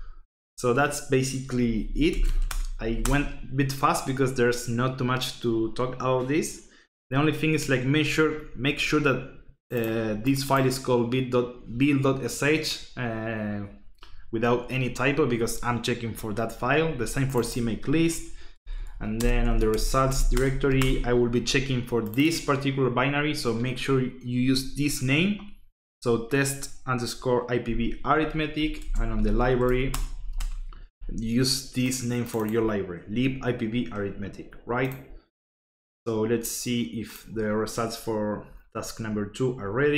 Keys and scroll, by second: 1.6-3.4 typing, 18.5-21.1 typing, 28.1-30.7 typing.